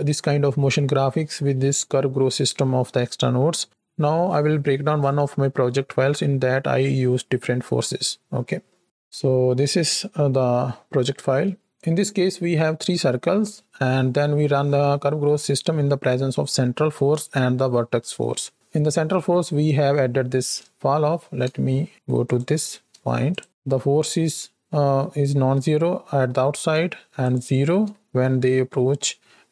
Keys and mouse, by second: 9.2 click, 9.2 middle click, 9.2 right click, 10.1 click, 10.1 middle click, 10.1 right click, 11.7 click, 11.7 space, 22.3 click, 23.4 ctrl+shift+click, 27.3 ctrl+shift+click.